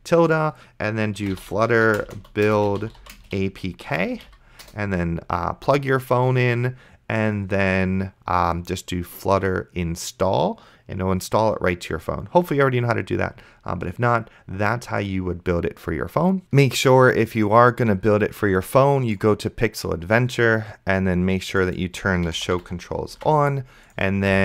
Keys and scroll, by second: 1.0-4.3 typing, 4.7 Return, 22.4 r, 22.7 e, 23.4 ctrl+s.